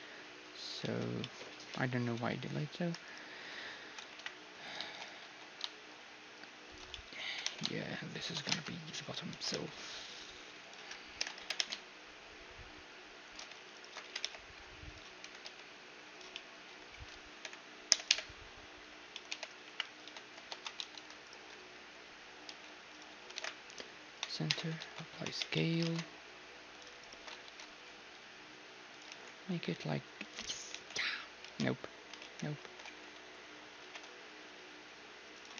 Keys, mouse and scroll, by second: 0.8 ctrl+z, 2.2 a, 3.1-4.7 right drag, 4.4 KP_1, 4.7 middle click, 4.9 shift+d, 5.3 s, 7.0-8.9 middle drag, 7.3 g, 8.6 ctrl+Tab, 9.3 e, 11.2 ctrl+l, 11.4 g, 13.8-15.9 right drag, 14.0 g, 15.3 e, 16.4-18.1 middle drag, 17.5 ctrl+l, 17.9 ctrl+i, 18.1 ctrl+h, 19.2 middle click, 19.3 h, 19.7 KP_1, 20.1 a, 20.5 ctrl+n, 20.8 a, 21.3-22.8 right drag, 22.5 s, 22.8 click, 22.9 right click, 23.4 alt+m, 24.5 Tab, 24.8 ctrl+a, 25.4 Tab, 25.6-27.5 middle drag, 27.0 click, 27.0-29.1 right drag, 27.5 ctrl+b, 29.1 t, 30.3-32.3 drag, 30.8 t, 31.1 a, 31.5 t, 32.3 ctrl+z, 32.6 ctrl+z, 33.8 ctrl+b, 35.5 t.